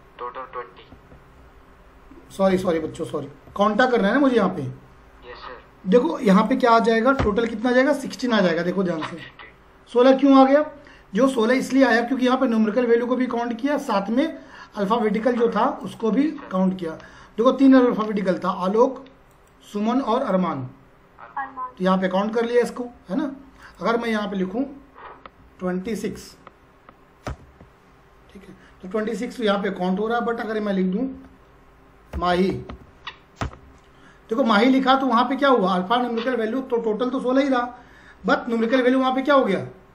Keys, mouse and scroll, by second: 0.9 Tab, 3.5 a, 4.3 Tab, 6.3 click, 7.2 Return, 9.0 click, 13.7 click, 18.5 click, 23.6 click, 25.3-25.9 typing, 27.3 Return, 31.0 Up, 31.9-33.2 typing, 33.4 Return.